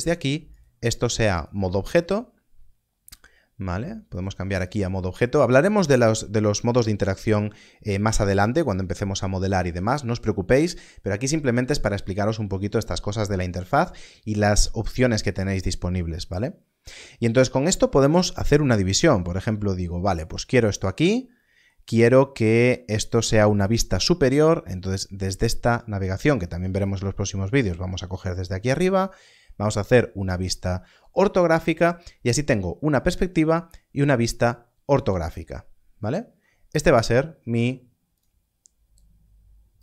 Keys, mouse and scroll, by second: 1.6 click, 4.0 click, 18.8 click, 21.3 middle click, 22.4-22.9 scroll up 1, 26.8-28.2 scroll up 1, 28.2 click, 29.6 click, 38.1 click.